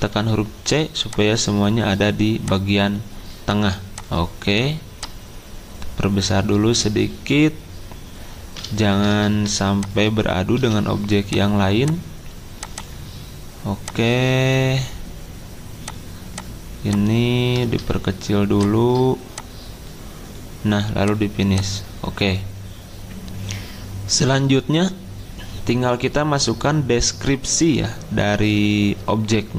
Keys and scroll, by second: 0.1 c, 8.9 ctrl+g, 10.6 c, 15.3 c.